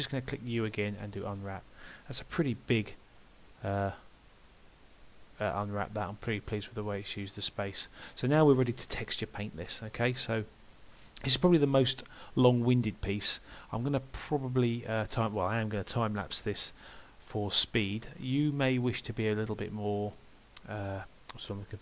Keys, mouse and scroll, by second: 0.7 u.